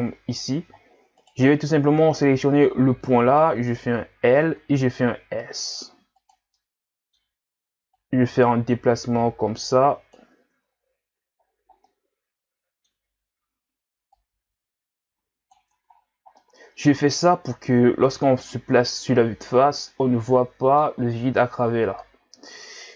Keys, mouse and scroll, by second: 1.3 right click, 3.3 l, 4.5 s, 6.5-8.0 middle drag, 8.0-10.6 drag, 10.6 Tab, 11.5-11.9 scroll down 2, 11.9-13.0 middle drag, 13.0-13.3 scroll up 2, 13.3 Tab, 14.1-15.7 drag, 15.7 Tab, 15.9 scroll down 2, 16.4-18.8 middle drag, 18.8-19.9 scroll up 3, 19.9-22.6 middle drag, 22.6-22.9 scroll down 2.